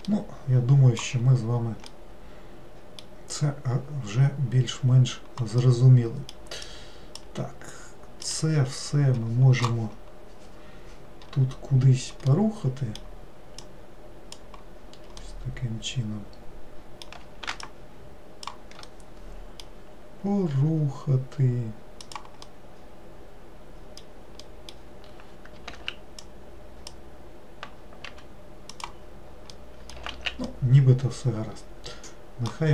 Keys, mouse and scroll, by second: 0.2-1.3 middle drag, 1.3 scroll down 1, 2.0-5.1 middle drag, 5.7-6.7 middle drag, 6.7 click, 8.3 click, 12.4-13.7 middle drag, 13.7 click, 15.3-17.8 middle drag, 17.8 shift+click, 19.0-20.6 middle drag, 20.6 g, 22.6-25.9 middle drag, 25.9 alt+z, 26.3 click, 29.6 middle click, 30.2 alt+z, 30.6-32.7 middle drag.